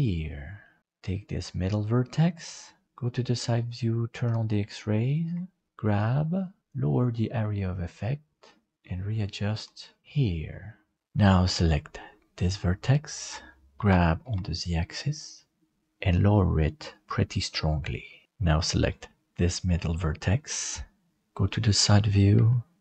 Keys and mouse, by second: 0.7 middle click, 1.3 right click, 2.0 middle click, 4.1 alt+z, 4.7 shift+middle click, 5.7 g, 8.7 middle click, 9.5 alt+z, 10.0 middle click, 12.3 right click, 13.7 g, 18.8 right click, 20.5 click, 22.3 g.